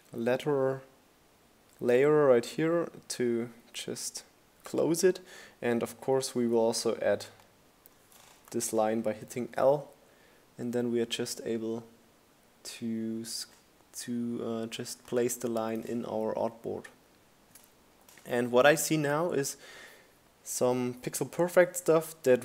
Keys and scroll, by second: 4.4 l, 16.2 Right.